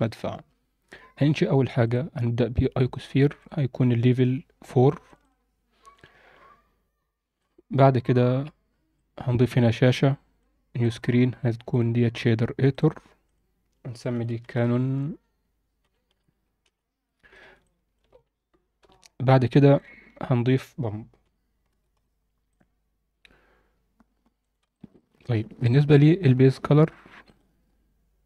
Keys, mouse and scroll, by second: 3.4 click, 5.3 click, 5.9 scroll up 2, 7.3 scroll up 1, 7.4 drag, 8.9-10.4 drag, 10.7-11.8 drag, 12.6 click, 13.2-16.6 drag, 16.6 l, 17.6 alt+shift+middle click, 18.2 scroll up 1, 18.8 n, 19.0-19.5 scroll up 2, 19.5 alt+shift+middle click, 20.1 shift+a, 24.7 alt+shift+middle click, 25.1-25.6 scroll up 4, 25.6 alt+shift+middle click.